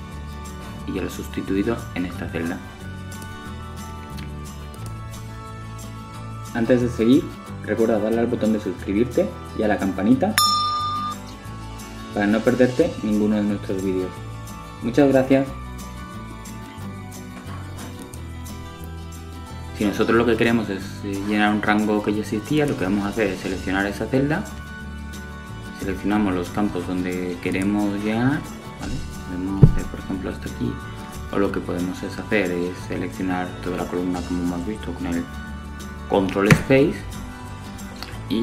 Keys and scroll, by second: 37.3 super+Return.